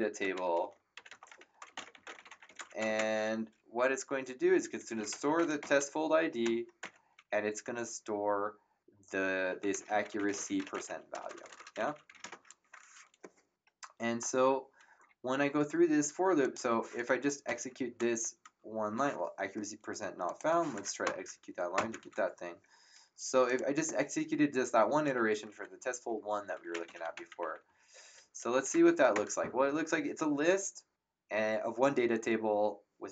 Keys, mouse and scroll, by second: 0.0-3.2 typing, 4.5-6.4 typing, 6.8 Return, 6.8 KP_Enter, 9.4-12.8 typing, 16.4 click, 17.4 Return, 17.4 KP_Enter, 20.2 click, 21.0 Return, 21.0 Num_Lock, 23.4 click, 26.5-29.0 typing, 29.1 Return.